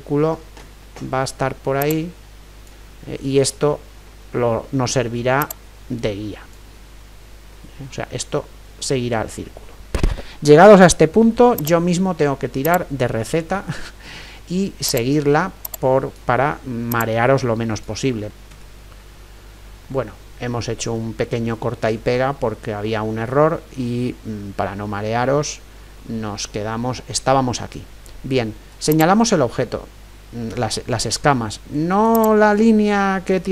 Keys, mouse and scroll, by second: 1.8-3.7 drag, 4.1-6.0 middle drag, 5.4-7.5 drag, 7.5-15.1 middle drag, 23.0-25.9 middle drag, 28.5 middle click, 28.9-30.8 right drag, 32.1-33.5 right drag.